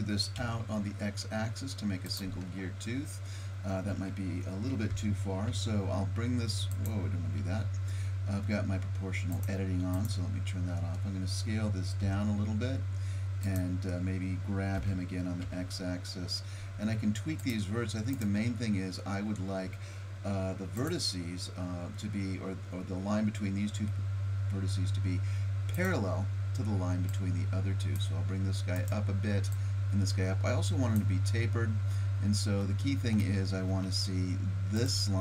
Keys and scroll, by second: 4.9 g, 7.4 ctrl+z, 12.0 s, 14.8 g.